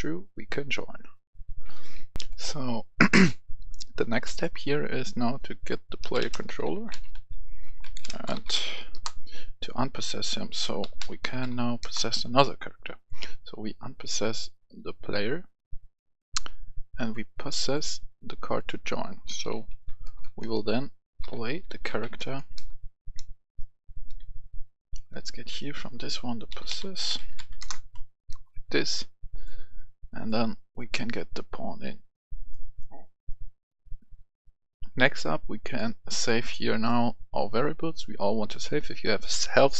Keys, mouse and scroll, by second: 2.2 F10, 3.9 right click, 6.0-8.5 typing, 8.9 Return, 9.9 click, 10.8-11.4 typing, 11.8 Return, 12.7-19.2 drag, 19.2-20.0 typing, 21.2-22.2 typing, 24.2 Escape, 25.1-26.4 drag, 26.5-27.3 typing, 27.6 Return, 28.6-32.4 drag, 32.5 right click, 35.1-38.4 drag.